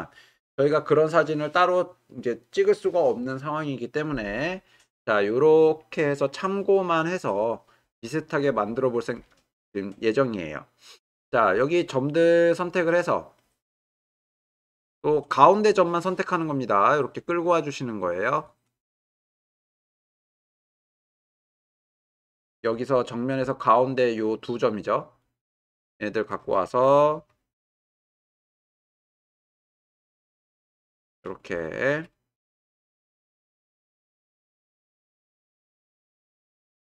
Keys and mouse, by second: 11.7 click, 14.5 g, 14.7 y, 19.1 click, 19.6 g, 19.8 y, 25.3 click, 27.7 g, 27.9 y, 30.6 shift+click, 31.7 click, 32.4 g, 32.6 y, 36.2-36.9 drag.